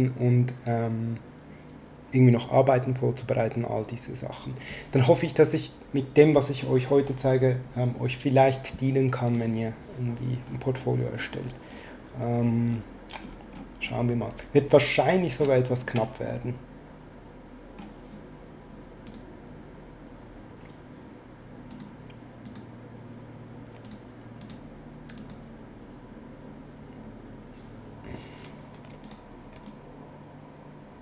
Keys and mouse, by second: 9.3 click, 19.0 click, 21.7 click, 23.8 click, 29.0 click, 29.7 ctrl+click.